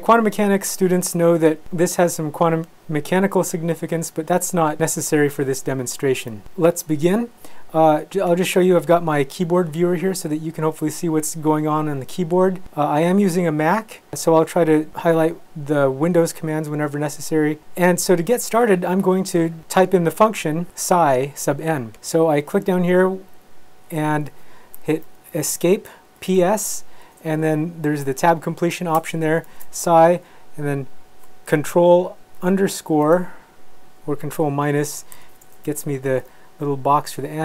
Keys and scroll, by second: 25.6 Escape, 26.0-26.9 typing, 29.0 Tab, 32.4 ctrl+-, 35.1 n, 35.7 Right.